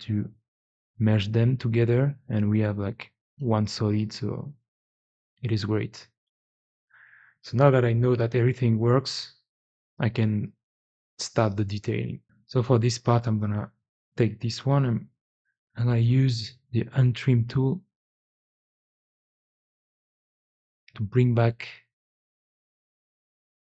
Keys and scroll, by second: 5.8 ctrl+z, 6.0 ctrl+z, 6.4 ctrl+z, 7.5 ctrl+z, 12.2 Escape, 14.3 f, 15.5 3, 17.0-17.4 typing.